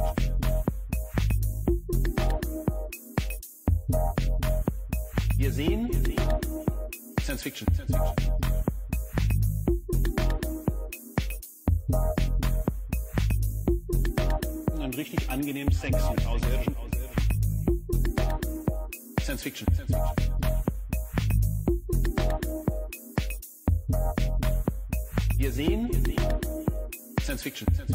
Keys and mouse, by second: 2.5 middle click, 3.5 click, 5.1 ctrl+t, 6.8 click, 8.6 click, 11.2 click, 13.2-16.8 drag, 18.8 click, 19.5-21.3 drag, 24.7 click, 26.4 middle click.